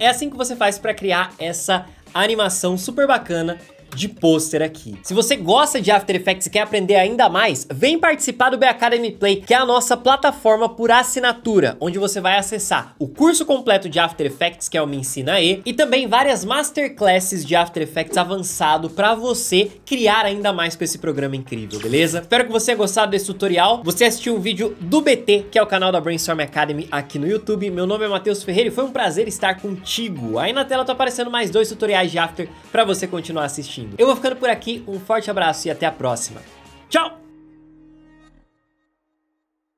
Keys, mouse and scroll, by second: 3.9 space.